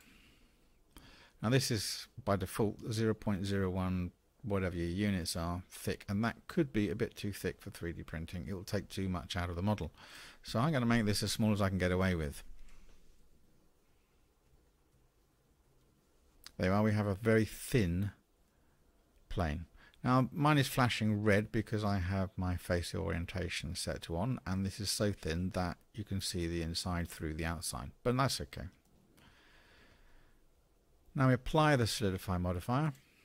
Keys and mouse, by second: 10.1-16.3 drag, 15.7 0, 16.3-24.5 middle drag, 25.5-28.8 middle drag, 32.9-33.2 drag.